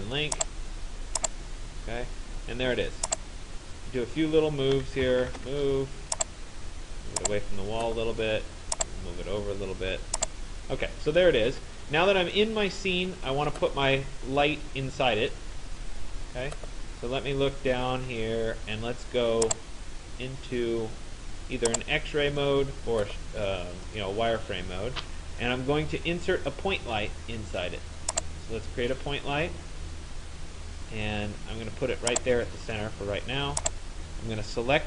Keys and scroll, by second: 4.9 Return, 10.7 Escape.